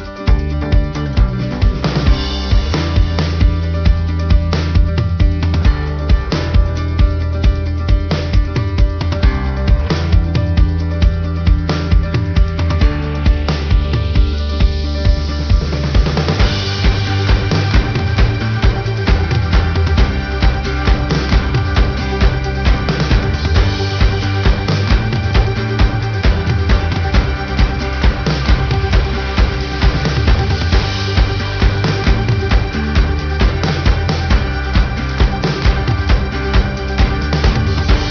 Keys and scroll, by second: 32.9 ctrl+alt+shift+n.